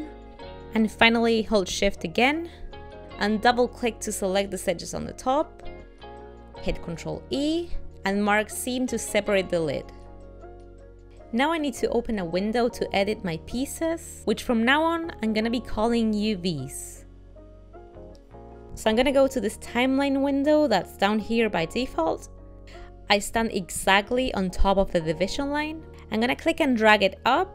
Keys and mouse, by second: 0.2 shift+middle click, 4.7 shift+click, 5.0 shift+click, 7.0 ctrl+e, 10.2 middle click, 12.6 middle click, 13.6 ctrl+r, 22.6 click.